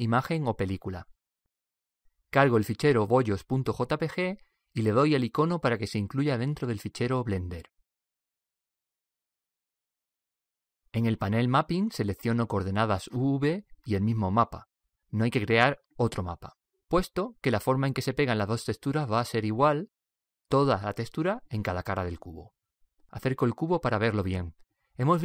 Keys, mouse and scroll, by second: 3.5 click, 5.0 click, 8.3 click, 10.8-13.8 drag, 24.5-25.2 scroll up 1.